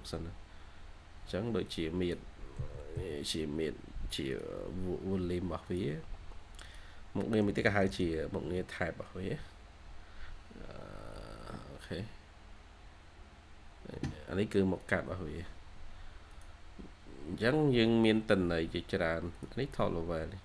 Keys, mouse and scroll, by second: 2.6-3.3 typing, 7.4-8.3 typing, 11.1-12.7 scroll down 1.